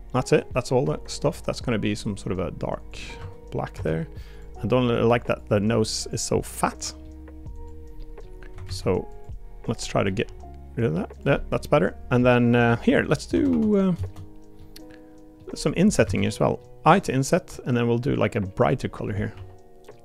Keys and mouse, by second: 0.1 middle click, 1.2 g, 3.2 Tab, 3.7 Tab, 4.3 click, 4.6 middle click, 6.0 click, 6.4 click, 6.8 middle click, 7.6 click, 8.0 middle click, 8.6 alt+z, 9.1 click, 9.8 middle click, 10.2 g, 11.3 middle click, 12.2 middle click, 12.8 Tab, 13.0 click, 13.3 Tab, 13.5 3, 14.5 middle click, 15.5 click, 16.0 alt+z, 16.2 middle click, 16.9 i, 19.3 g.